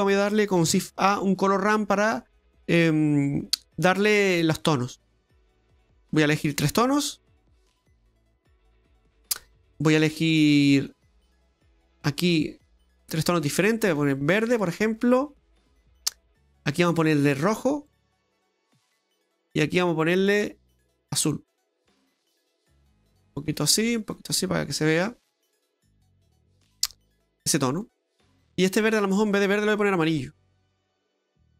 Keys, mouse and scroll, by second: 0.7 shift+a, 8.3 click, 8.7 middle click, 9.2-9.7 scroll up 6, 9.7 middle click, 10.8 click, 11.7 click, 15.9 click, 16.5 click, 19.3 click, 20.2 click, 22.6 click, 24.8 click, 26.9 click, 29.3 click.